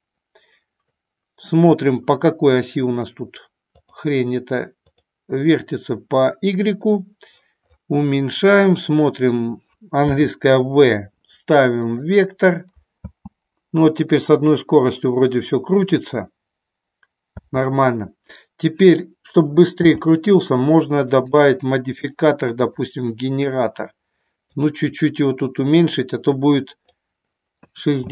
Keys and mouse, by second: 0.0 click, 2.3-27.2 drag.